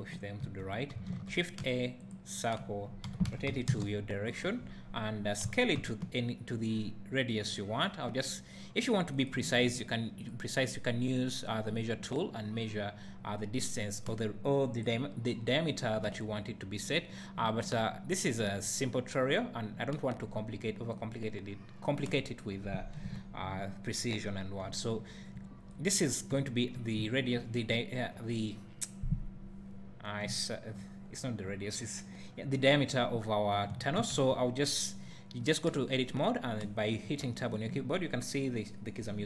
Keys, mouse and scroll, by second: 0.4 n, 1.1 shift+a, 3.1 r, 5.4 s, 9.2 ctrl+click, 10.2 click, 12.7 drag, 16.7 click, 18.1-39.2 drag, 23.0 KP_Decimal, 24.9 `, 26.1 scroll down 1, 26.4 `, 34.1 Tab.